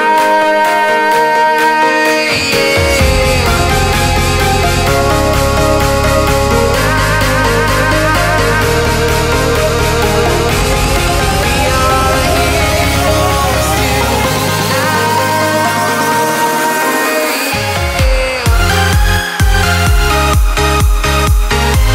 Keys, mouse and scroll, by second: 0.0 scroll up 1, 1.6 right click, 2.3-2.7 scroll down 1, 2.7 right click, 3.2 scroll up 1, 3.6 click, 3.8 scroll down 1, 3.9-5.2 right drag, 5.2 scroll up 1, 5.5 right click, 6.4 scroll down 1, 6.7 click, 8.2 click, 9.4-12.1 right drag, 12.1-12.4 scroll down 1, 12.4-14.6 right drag, 14.6 click, 14.8-15.4 scroll down 1, 17.1 scroll up 1, 18.0 scroll down 1, 18.3-18.7 scroll up 1, 20.1 scroll down 1, 20.8 typing.